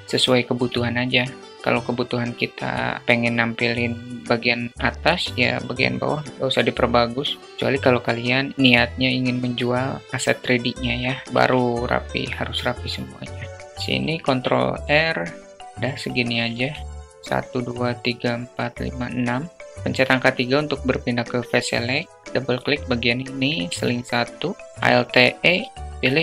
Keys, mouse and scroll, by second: 0.1 click, 6.0 alt+middle click, 7.4 alt+middle click, 7.7 e, 9.7 alt+middle click, 11.1 ctrl+r, 15.5 alt+shift+middle click, 18.8 3, 21.3 click, 22.4 shift+click, 22.7 shift+click, 23.5 shift+click, 24.6 alt+e.